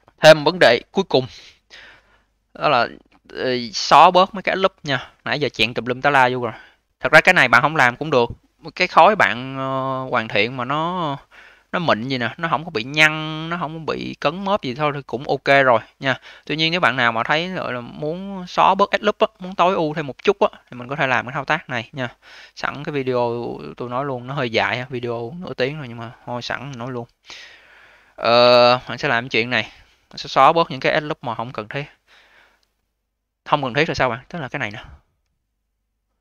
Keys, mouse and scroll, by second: 2.7-3.1 scroll down 2, 3.1-3.6 alt+middle drag, 3.6-4.5 alt+drag, 4.5-5.0 alt+middle drag, 5.0-8.1 alt+drag, 10.2-10.6 alt+middle drag, 10.6-12.3 alt+drag, 12.3-12.8 scroll up 4, 12.8-14.0 alt+drag, 14.0-14.5 scroll down 4, 14.5-14.9 alt+middle drag, 14.9-17.9 alt+drag, 19.0-19.5 alt+middle drag, 19.5-21.0 alt+drag, 21.0 alt+middle click, 21.5-22.3 alt+drag, 22.3-22.9 scroll up 2, 22.9-23.3 alt+middle drag, 23.3-25.6 alt+drag, 25.6-26.6 scroll up 1, 26.6 v, 28.6 q, 29.1-30.4 scroll up 2, 30.4-32.2 scroll up 1, 33.2 click, 33.4 click, 33.9-34.7 scroll down 1, 34.7-35.4 alt+middle drag, 35.4-35.8 scroll down 2.